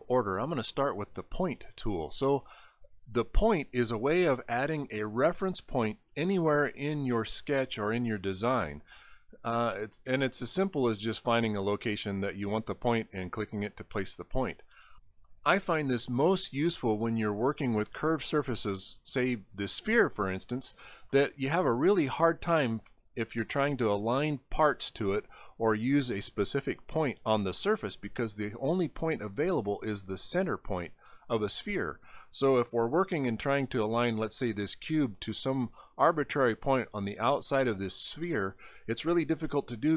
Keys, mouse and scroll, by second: 1.2 click, 12.7 click, 16.9 click, 17.4 middle click, 17.8 middle click, 21.2 middle click.